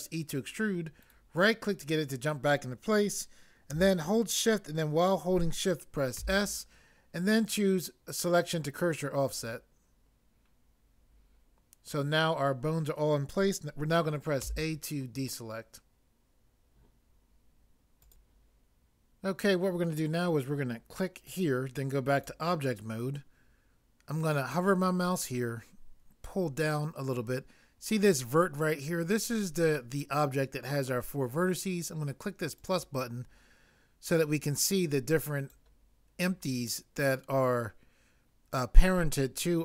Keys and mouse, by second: 6.2 s, 14.5 a.